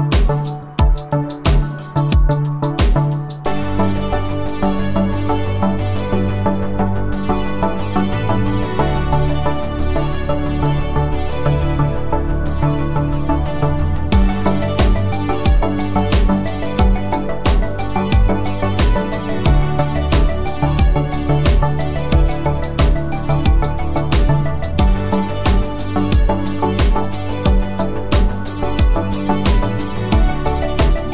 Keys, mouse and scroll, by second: 9.8 click, 12.3 space, 19.0 space, 22.8 click.